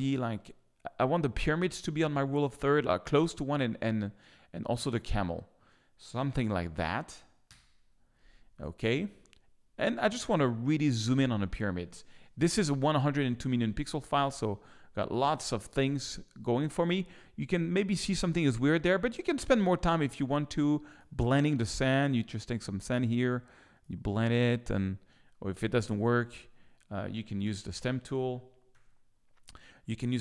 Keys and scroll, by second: 7.4 Return, 12.2 z, 25.6 super+z, 27.4 s, 28.3 super+s, 28.7 super+d.